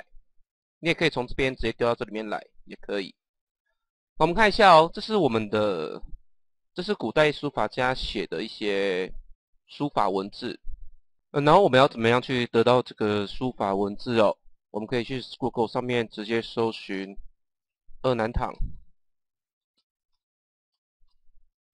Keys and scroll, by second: 16.9 ctrl+space, 18.4 -, 19.5-21.0 typing.